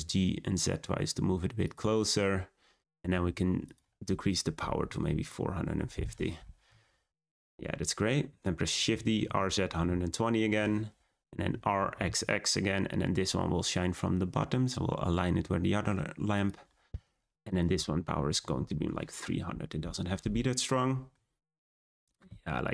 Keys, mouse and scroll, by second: 1.9-2.4 scroll up 4, 3.6-6.6 drag, 7.0 scroll down 2, 8.7 shift+d, 11.5 r, 17.4-18.5 drag, 18.5 0, 20.7-21.0 scroll down 1, 21.0-21.6 middle drag, 21.6-22.5 scroll down 4, 22.5-22.7 shift+middle drag.